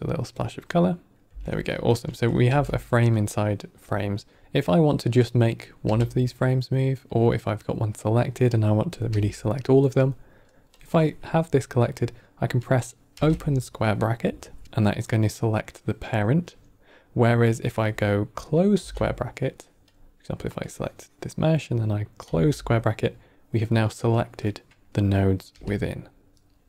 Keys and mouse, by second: 0.1 drag, 1.3 click, 1.3 n, 1.8 click, 2.4 g, 5.1 click, 5.5 click, 5.7 g, 8.8 click, 9.0 g, 10.6 click, 13.0 [, 14.6 g, 16.4 click, 17.4 click, 18.7 ], 19.8 click, 20.5-21.4 drag, 22.1 ], 25.4 g.